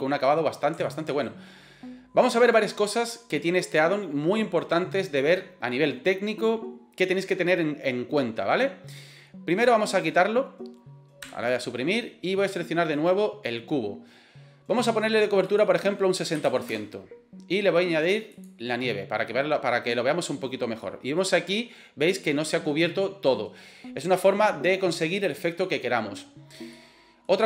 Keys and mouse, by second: 0.8 shift+middle click, 9.6 right click, 11.3 Delete, 13.0 right click, 15.5-17.2 drag, 19.3 middle click, 20.8 middle click, 26.8-27.3 middle drag.